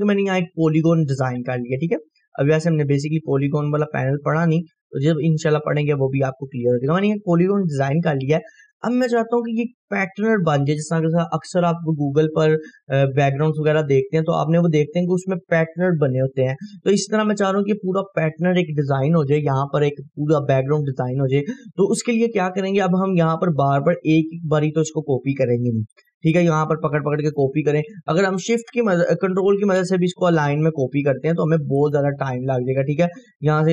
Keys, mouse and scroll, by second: 0.3-3.5 drag, 5.3 scroll up 1, 5.8-6.7 drag, 8.8 scroll down 1, 17.1-17.8 scroll up 1, 21.3 scroll up 1, 24.0-26.3 drag, 26.0 right click, 26.9-27.6 click, 27.3 right click, 28.0 Delete, 28.4 click, 28.7 Delete, 29.7-32.2 drag, 31.9 ctrl+right click, 32.7-33.7 click.